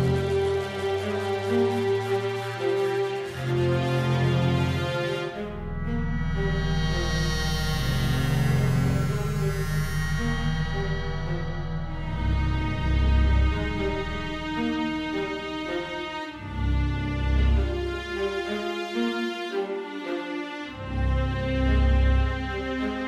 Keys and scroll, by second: 2.2 Left, 2.4 Right, 2.5 Up.